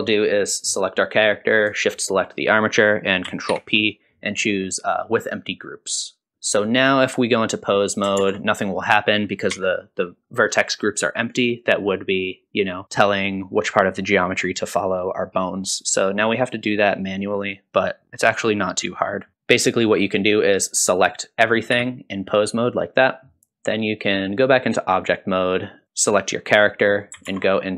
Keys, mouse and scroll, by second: 0.6 click, 1.9 shift+click, 3.5 ctrl+p, 6.3 middle click, 6.5 click, 7.7 click, 8.2 ctrl+Tab, 8.7 click, 9.5 r, 21.7 a, 24.4-25.0 drag, 25.8 click, 27.3 ctrl+Tab.